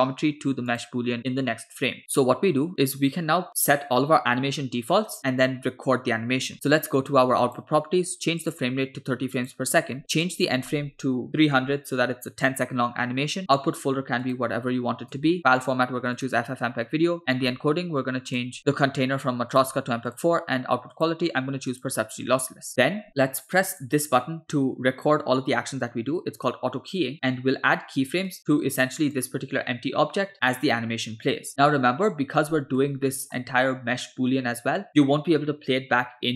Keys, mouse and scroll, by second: 0.7 click, 7.5 click, 8.5-9.6 drag, 10.3-12.1 drag, 11.6 0, 13.4-13.9 scroll down 2, 14.3-15.4 drag, 15.3 /, 15.6-16.3 drag, 16.7 scroll down 2, 17.2 click, 17.5-17.8 scroll down 2, 18.4 drag, 18.6 scroll down 1, 19.6-20.2 drag, 21.0-22.0 drag, 22.7-23.0 scroll down 1, 23.7 click, 28.3 click, 29.2 click, 31.5-32.8 middle drag, 33.1 shift+middle drag.